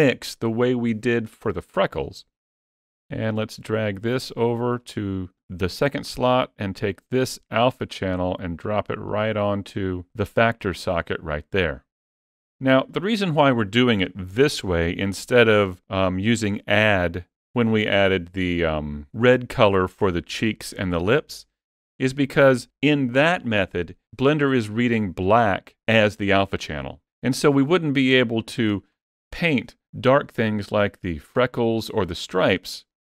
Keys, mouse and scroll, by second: 3.2 click, 6.6 click, 28.2 scroll up 4, 28.7 shift+middle click, 30.1-30.5 scroll down 2, 31.3 shift+middle click.